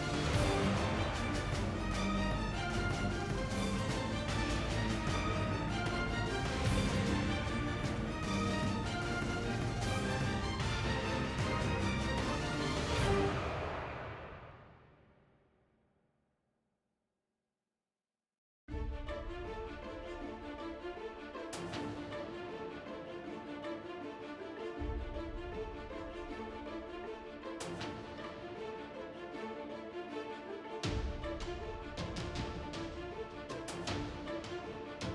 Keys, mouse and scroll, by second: 0.4 z, 1.0 ctrl+z, 1.8 ctrl+z, 2.4 KP_1, 3.1 ctrl+Tab, 3.8 KP_1, 4.6 ctrl+r, 5.4 ctrl+Tab, 5.9 KP_1, 6.3 g, 7.0 ctrl+Tab, 7.4 g, 16.8-17.9 right drag, 23.6 ctrl+Tab, 24.0 ctrl+x, 24.8 ctrl+r, 28.3 ctrl+Tab, 32.4 ctrl+Tab.